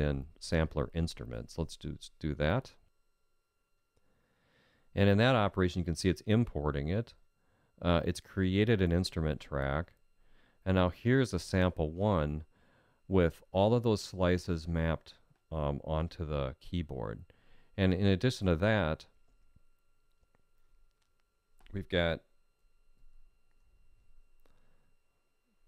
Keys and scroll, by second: 22.7 alt+z.